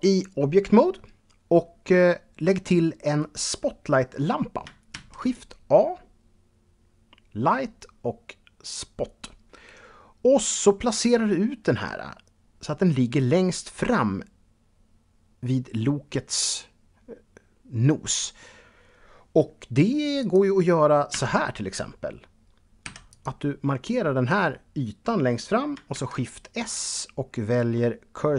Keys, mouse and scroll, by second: 4.8 shift+a, 8.5 click, 20.0 click, 21.0 Tab, 22.7 3, 22.9 click, 25.8 shift+s.